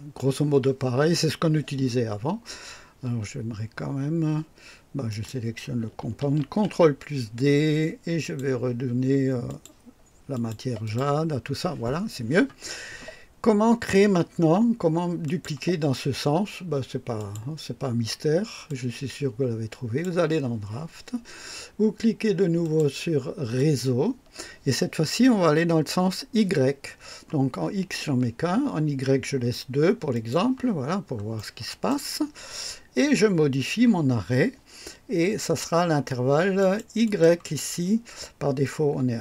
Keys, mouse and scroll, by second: 0.2 click, 5.1 click, 6.4 ctrl+d, 8.2 click, 9.5 click, 10.3 click, 10.8 click, 15.2 click, 17.2 click, 18.7 click, 22.6 click, 23.6 click, 27.7 scroll down 1, 30.1 click, 30.8 scroll down 1, 31.4-32.1 right drag, 36.6 click, 37.0 click, 37.8-38.1 scroll down 1.